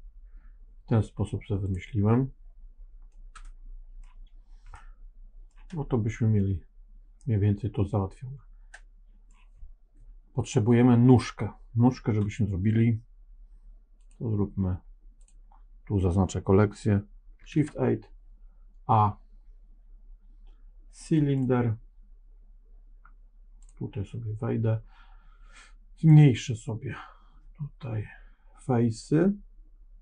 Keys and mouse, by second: 1.6 click, 3.0 middle click, 4.7 middle click, 7.1-9.2 middle drag, 13.9 click, 17.4 shift+a, 26.0-30.0 drag.